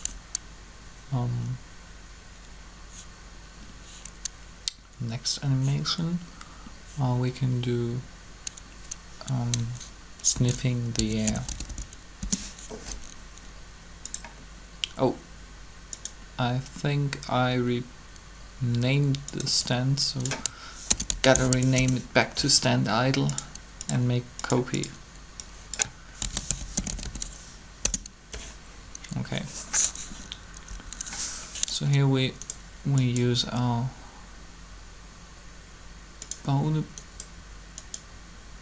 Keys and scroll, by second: 10.2-11.6 typing, 12.2 Return, 20.9-21.4 typing, 21.6 Return, 25.8-27.6 typing, 27.6 Return, 30.6 Up.